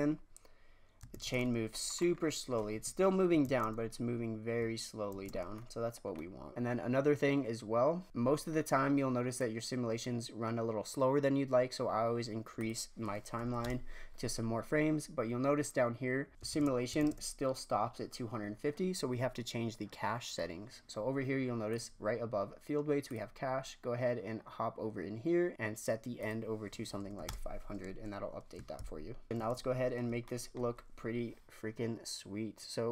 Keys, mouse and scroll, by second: 1.1 shift+space, 1.7 scroll up 1, 2.0-2.7 middle drag, 2.7 KP_1, 3.0-3.4 scroll up 1, 3.4 shift+space, 5.1 shift+space, 5.3-6.0 scroll down 5, 6.0 scroll up 1, 6.2 middle click, 6.5-6.8 scroll up 1, 8.0-9.3 scroll down 8, 9.3-12.4 drag, 12.5 click, 13.5 KP_0, 16.3 click, 16.5 shift+space, 17.0 shift+space, 21.7-23.3 drag, 23.3-25.5 scroll down 4, 26.1-27.1 drag, 27.1 KP_0, 29.3 shift+space, 30.3-32.9 shift+middle drag.